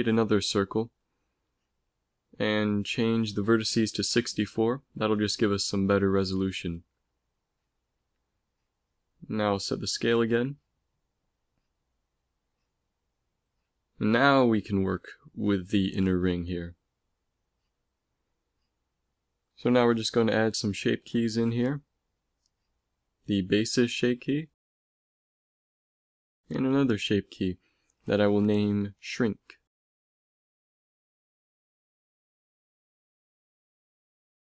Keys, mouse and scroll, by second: 2.9 F6, 6.8 s, 8.8-10.7 drag, 9.8 ctrl+v, 10.3 ctrl+v, 10.7 ctrl+v, 11.6 click, 12.5 ctrl+s, 14.5 Tab, 15.1 e, 15.8 s, 19.2 Tab, 21.3-32.6 drag.